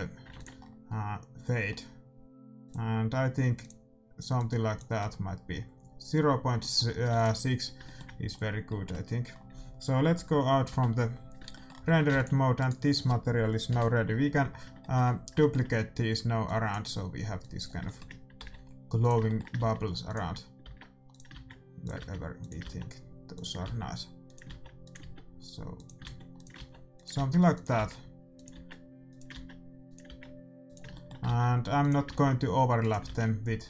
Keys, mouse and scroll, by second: 0.3 ctrl+s, 2.6-7.1 drag, 7.1 ctrl+s, 10.7 KP_Divide, 11.2 middle click, 11.8 a, 12.1 ctrl+s, 12.5-14.3 right drag, 13.6 KP_7, 16.4-19.2 drag, 17.8-19.0 middle drag, 18.3 shift+d, 19.3-21.0 middle drag, 19.5 shift+d, 20.6-25.0 typing, 26.0-30.0 typing, 30.9 middle click, 31.3 shift+d, 32.1 shift+d, 33.0 shift+d.